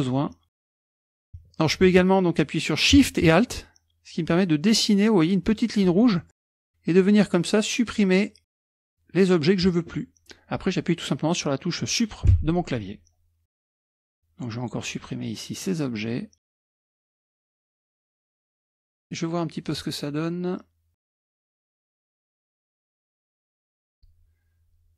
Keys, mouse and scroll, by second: 0.5 shift+click, 0.8 shift+drag, 1.0 shift+click, 3.5-6.1 alt+shift+drag, 6.9-8.8 alt+shift+drag, 12.4 Delete, 13.5 middle click, 14.1-15.1 alt+shift+drag, 15.1 alt+shift+middle click, 15.2-16.0 alt+shift+drag, 16.2 alt+shift+click, 16.8 alt+shift+click, 17.1 Delete, 17.6 alt+shift+click, 17.7 Delete, 18.4 alt+shift+click, 18.6 Delete, 19.0-19.5 scroll up 2, 19.7 click, 20.9 click, 21.1 click, 21.5 click, 21.8 alt+shift+click, 22.4 Delete, 22.7 click, 22.9 Delete, 23.1 alt+shift+click, 23.5 alt+shift+click, 23.9 Delete.